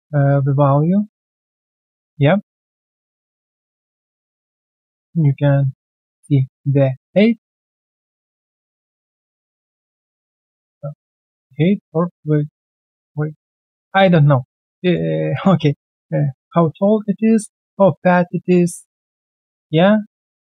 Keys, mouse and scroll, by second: 0.2 alt+click, 0.8 alt+middle click, 1.1 alt+click, 1.4 alt+right click, 1.6 alt+click, 3.1 alt+middle click, 3.4 alt+click, 4.1 alt+middle click, 4.4 alt+click, 5.0 alt+middle click, 5.6-5.9 alt+scroll down 1, 6.0 alt+click, 13.4 alt+click, 14.1 alt+click, 14.4 alt+middle click, 14.8 alt+click, 15.1 alt+right click, 15.3 alt+click, 16.9 alt+middle click, 17.3 alt+click, 18.1 alt+click, 20.1 alt+click.